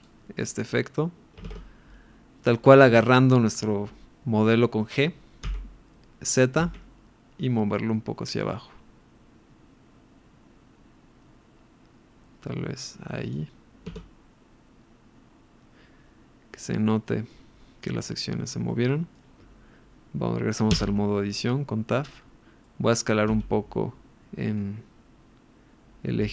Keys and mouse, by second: 2.6 middle click, 5.4 g, 6.6 z, 13.3 click, 13.9 Tab, 16.7-17.3 middle drag, 18.7-19.1 middle drag, 21.2 Tab, 22.7 middle click, 23.3 s.